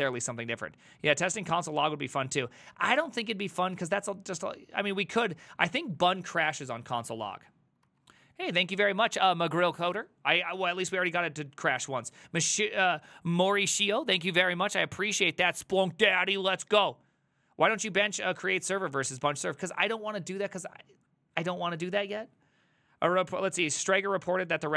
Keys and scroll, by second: 7.0 alt+{.